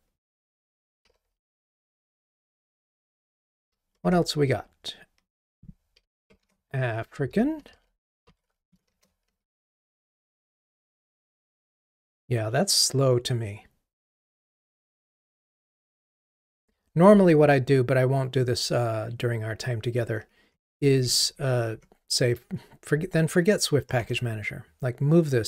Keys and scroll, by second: 4.0 Delete, 4.1 ctrl+Tab, 6.5 ctrl+Tab, 7.6 super+v, 9.8 Delete, 16.8 super+d, 24.0 ctrl+Tab.